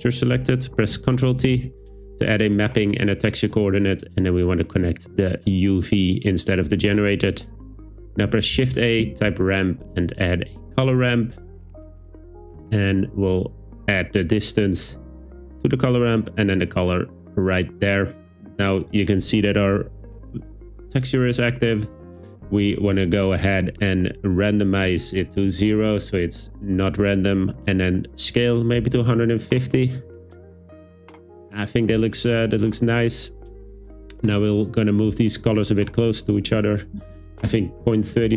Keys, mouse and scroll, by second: 1.5 ctrl+t, 5.2 click, 5.4 click, 8.6 shift+a, 12.6 click, 13.5 click, 13.6 click, 16.8 click, 24.5-25.8 drag, 27.7-29.1 drag, 34.2 click, 35.1 click, 35.7 click, 36.2-37.5 drag.